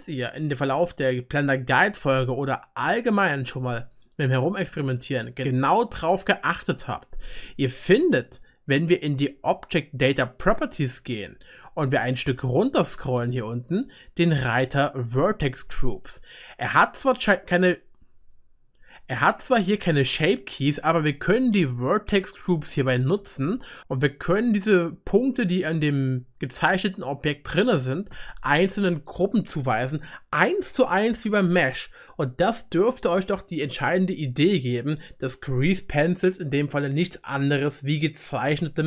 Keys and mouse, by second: 8.3-29.1 right drag, 10.4 click, 10.4 middle click, 22.6-29.1 drag, 22.6-29.1 middle drag, 33.7 click, 33.7-38.8 middle drag, 33.7 right click, 37.3-38.8 drag, 37.3-38.8 right drag.